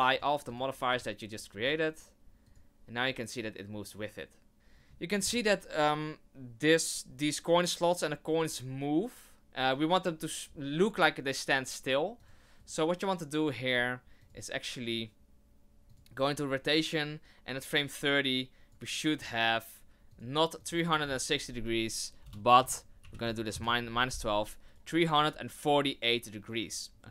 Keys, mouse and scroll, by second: 0.1 click, 0.4 click, 0.9 click, 1.5 scroll up 3, 2.4 click, 4.5 right click, 5.1 click, 12.2 click, 12.6 right click, 14.2 click, 15.9 click, 17.5 click, 20.1 click, 24.6 right click.